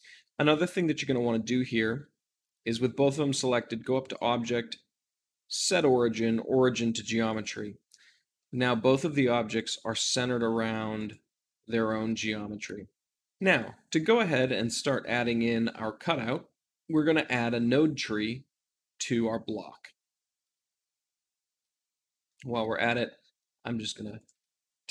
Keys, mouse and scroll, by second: 8.3-9.3 middle drag, 9.3 click, 9.7 r, 10.2 right click, 10.8 click, 11.3 r, 11.9-13.0 right drag, 13.0-20.4 shift+middle drag, 20.3-22.0 drag, 22.2-23.7 shift+middle drag, 23.6-24.9 drag.